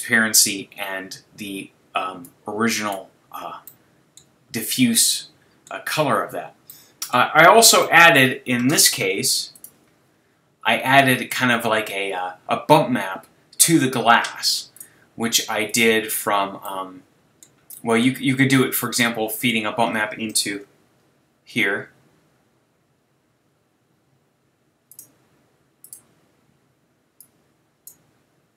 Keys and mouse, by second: 2.9-4.2 drag, 4.2-14.4 middle drag, 15.7-17.5 drag, 19.5-20.4 middle drag, 20.6 shift+a, 27.8-28.5 drag.